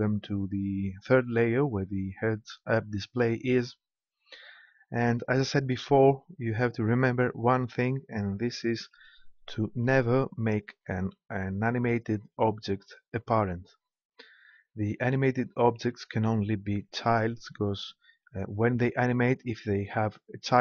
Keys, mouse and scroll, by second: 8.9-10.8 right drag.